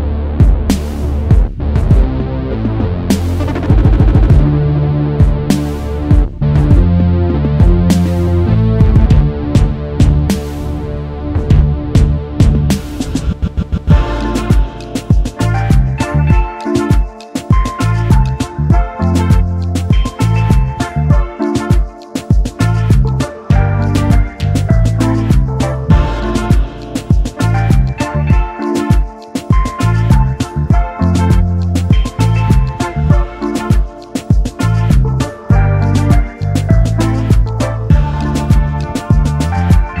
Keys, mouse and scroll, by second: 0.0 BackSpace, 0.5 1, 8.3 5, 16.3-17.0 alt+scroll down 1, 17.1 alt+scroll up 1, 18.9 ctrl+g, 19.5 alt+scroll down 1, 19.6-20.1 alt+scroll up 1, 20.1-20.6 alt+scroll down 1, 20.6 alt+scroll down 1, 20.7 double click, 22.2 shift+click, 23.1 alt+scroll up 1, 26.8 shift+click, 29.0 alt+scroll down 1, 29.6 space, 29.7 double click, 32.9-33.3 alt+scroll up 1, 33.6 alt+scroll down 1, 33.9 space, 36.2-37.1 scroll down 1, 37.1-37.4 scroll, 37.4 ctrl+g, 38.1 space, 38.2 double click, 38.7-40.0 scroll up 1.